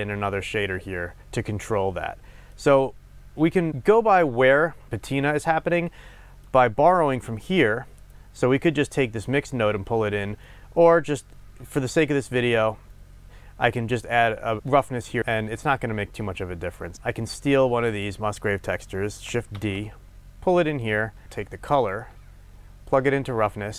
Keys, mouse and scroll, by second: 0.1-2.1 scroll up 2, 7.6-10.5 drag, 10.5-18.0 middle drag, 11.3-11.9 scroll up 2, 11.9-12.8 scroll down 2, 12.8-13.9 scroll up 2, 13.9-15.5 scroll up 1, 17.0-18.0 scroll down 2, 18.0 click, 19.7 shift+d, 20.9 click, 21.2-22.0 scroll up 1, 22.0-23.7 drag.